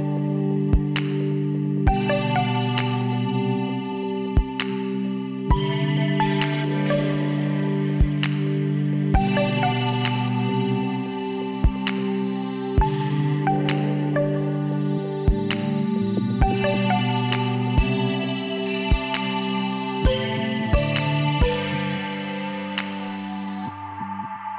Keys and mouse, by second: 1.8-4.5 middle drag, 4.5-7.6 drag, 7.0 shift+d, 10.6-12.1 middle drag, 12.1 s, 13.3 z, 13.8 KP_1, 14.4 z, 15.5 click, 16.3 middle click, 17.2 s, 19.4-20.9 drag, 21.3-24.5 middle drag.